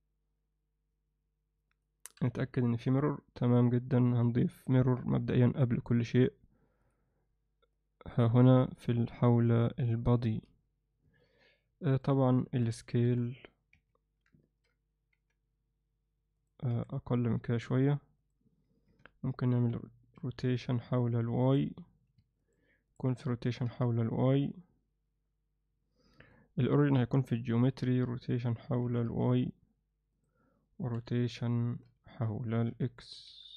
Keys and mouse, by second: 2.4 KP_1, 4.2 click, 4.6-6.9 drag, 7.7 click, 11.2-12.0 alt+middle drag, 12.4 alt+middle click, 13.0 KP_1, 13.7 z, 15.1 g, 16.7 s, 18.9 r, 21.9-22.9 drag, 23.4 r, 26.5-28.8 right drag, 28.8 r, 30.9 KP_3, 31.6 z, 32.7 r.